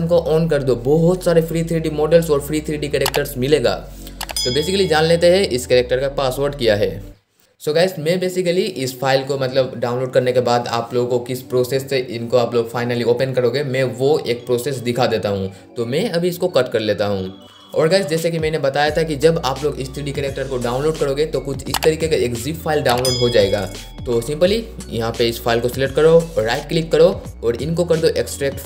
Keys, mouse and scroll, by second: 26.5 right click.